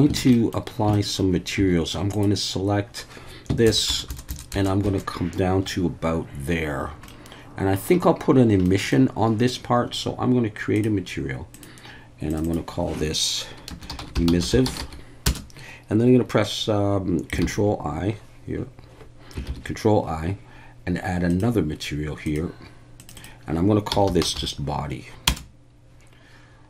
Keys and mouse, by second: 0.2 alt+a, 0.3 middle click, 0.9 shift+middle click, 1.6 3, 3.7 ctrl+KP_Add, 3.9 ctrl+KP_Add, 4.1 ctrl+KP_Add, 4.3 ctrl+KP_Add, 4.5 ctrl+KP_Add, 4.8 ctrl+KP_Add, 7.1 middle click, 8.7 middle click, 10.8 click, 11.5-12.4 drag, 12.5-18.2 drag, 14.4 s, 17.4 ctrl+i, 19.5 ctrl+i, 21.3 click, 23.0 click, 23.2-25.9 drag.